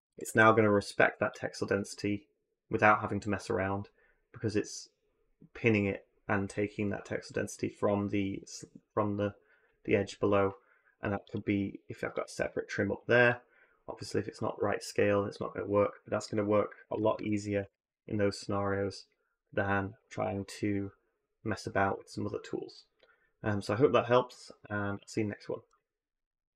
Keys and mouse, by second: 0.1 click, 0.8 click, 12.0-13.2 drag, 16.0 click, 17.0 ctrl+z, 17.4 a, 17.5 a.